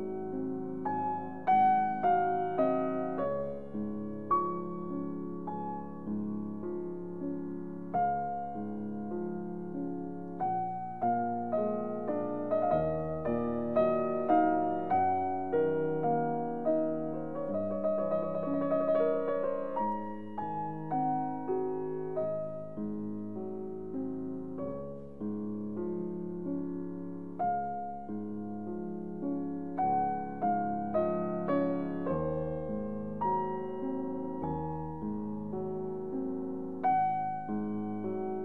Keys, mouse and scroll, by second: 0.0 e, 1.5 x, 8.1 click, 8.9-17.2 middle drag, 20.8 click, 22.7-25.6 middle drag, 25.6 scroll down 1, 27.0-30.3 middle drag, 30.3-30.7 scroll down 1, 30.7-35.6 middle drag, 35.6 click, 37.8 click.